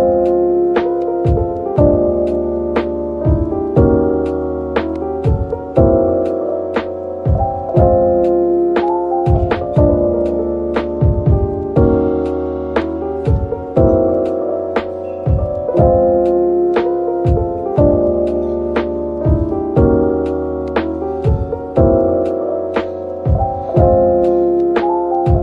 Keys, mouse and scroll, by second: 0.5 typing, 2.0 typing, 4.4-5.2 typing, 6.6 middle click, 8.9 Tab, 9.3-10.9 scroll down 1, 12.0 shift+click, 12.6 Tab, 14.0 shift+click, 16.1 Tab, 17.9 ctrl+l, 18.8 typing, 19.9 right click, 20.3 typing, 21.4 right click, 22.0-22.9 typing, 24.1 middle click, 24.4-25.4 typing.